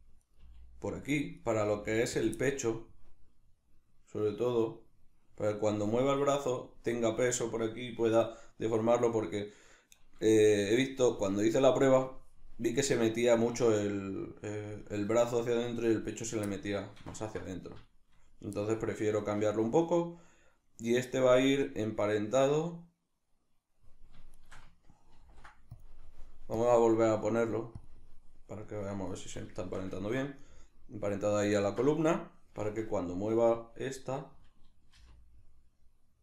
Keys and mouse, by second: 0.0 click, 0.3 right click, 0.4 g, 1.1 click, 1.4 right click, 1.6 g, 2.2 click, 2.4-13.7 middle drag, 13.7 right click, 16.5-24.4 middle drag, 24.4 shift+right click, 25.2 ctrl+p, 26.6-29.6 drag, 29.6-34.0 shift+middle drag, 32.7 Tab, 34.0 right click, 34.9 r.